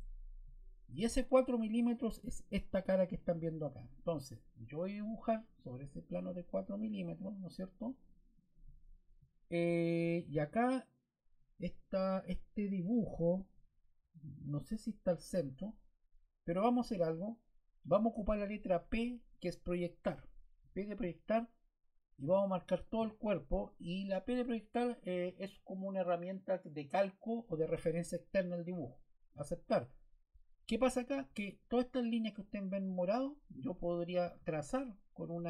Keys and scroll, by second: 20.5 p.